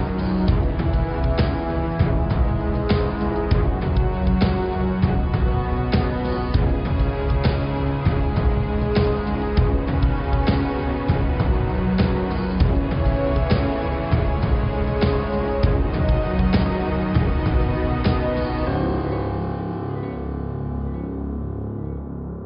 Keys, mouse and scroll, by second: 0.0 scroll up 1, 0.3 Tab, 0.6 middle click, 0.9 Tab, 1.1 click, 2.2 click, 3.5 click, 4.3 click, 4.6 Tab, 4.8 click, 5.1 Tab, 5.4 click, 6.3 g, 8.7 shift+a, 10.3 click, 10.9 click, 11.6 click, 12.0 shift+a, 13.1 click, 13.5 Tab, 13.8 shift+a, 15.7-16.0 scroll down 5, 16.0 middle click, 16.7 r, 19.9 click, 20.4 scroll up 4, 20.8 s.